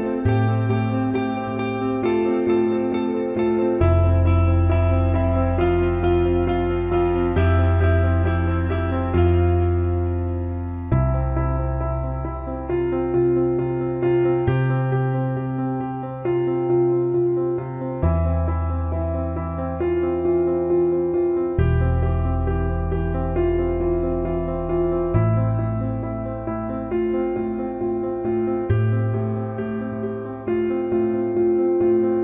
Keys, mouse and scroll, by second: 3.4 click, 9.2 ctrl+i, 12.7 click, 17.7-18.1 drag, 18.6 alt+middle click, 20.0 alt+middle click, 20.4 alt+shift+middle click, 21.3-22.2 alt+middle drag, 23.5-25.6 alt+middle drag, 25.9 alt+middle click, 26.9-27.2 alt+shift+middle drag, 29.2 alt+shift+middle drag, 30.1 click, 31.0 Tab.